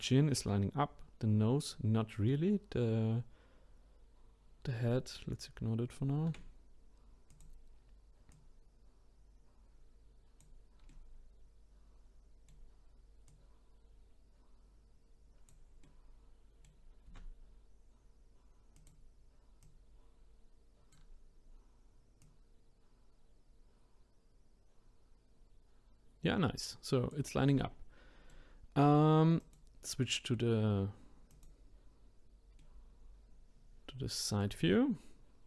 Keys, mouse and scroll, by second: 6.3 s, 8.3 click, 10.9-13.3 middle drag, 13.3-15.8 drag, 15.8-17.0 middle drag, 17.0 s, 19.6 click, 22.2 click, 27.6-29.4 middle drag, 29.4 click, 31.3 click, 32.6-35.4 middle drag.